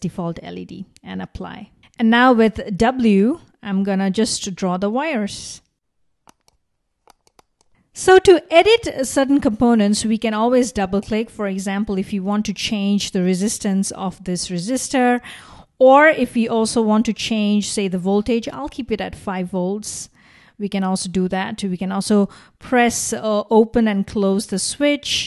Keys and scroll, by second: 2.3 typing.